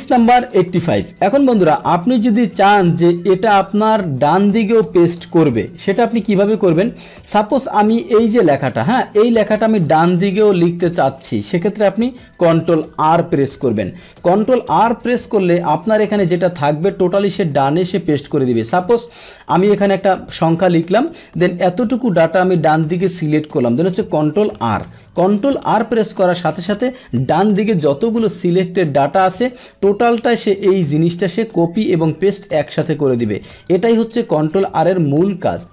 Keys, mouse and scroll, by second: 0.6-3.9 middle drag, 5.7-7.7 scroll down 3, 7.7 click, 8.4 click, 9.8-11.3 drag, 12.8 ctrl+r, 17.4 ctrl+z, 18.3 click, 19.5 click, 20.9 click, 21.6-23.2 drag, 24.6 ctrl+r, 27.8 Delete, 28.5 Delete, 28.5-30.6 middle drag, 30.8-31.8 drag, 32.4 click, 33.6 click, 35.6 alt+Tab.